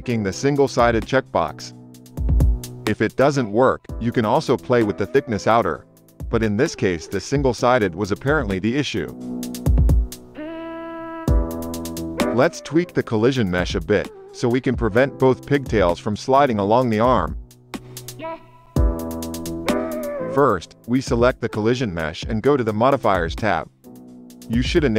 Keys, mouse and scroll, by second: 0.3 click, 2.2 space, 19.6 space, 21.1 click, 23.5 click, 23.9 click.